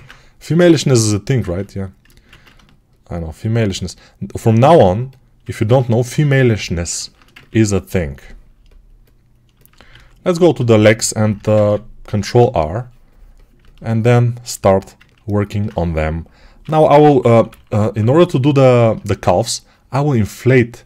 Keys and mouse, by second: 1.3 ctrl+z, 2.1 ctrl+z, 6.7-11.0 alt+shift+drag, 9.8 alt+q, 11.0-14.5 ctrl+alt+right drag, 11.5 ctrl+r, 16.5 6, 16.9 ], 17.4 [, 17.7 [.